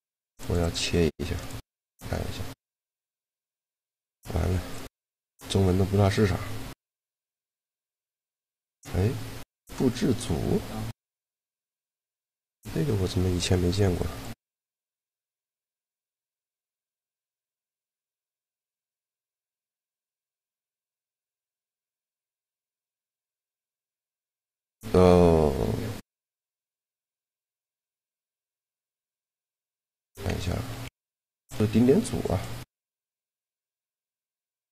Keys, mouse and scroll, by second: 0.5-1.5 drag, 5.7-7.5 right drag, 6.8 shift+l, 18.3-19.7 drag, 19.7 Tab, 20.7 a, 22.9 shift+l, 24.4 Tab, 27.0 Tab, 27.7 a, 28.1 a, 28.3-29.7 middle drag, 28.5 b, 30.1 z, 30.5 a, 30.6 b, 32.1-33.6 drag.